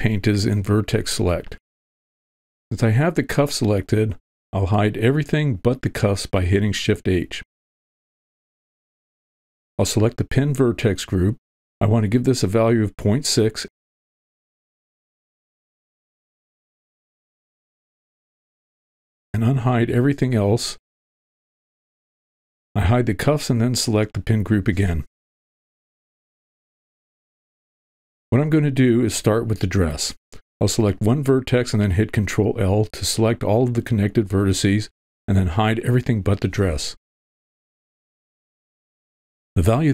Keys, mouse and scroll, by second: 0.5 v, 8.2 shift+h, 9.5 v, 13.5-15.9 drag, 17.3 click, 18.0 shift+h, 20.3 alt+h, 20.6 alt+a, 22.1 click, 23.9 h, 24.7 click, 24.8 h, 25.2 click, 26.6 click, 33.0 ctrl+l, 39.6 shift+h.